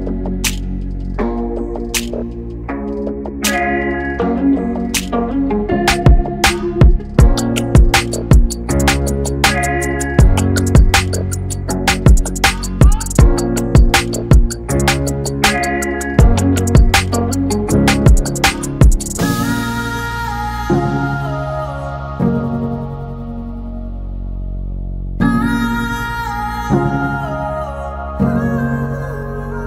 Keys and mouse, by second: 4.3 click, 8.1-11.2 drag.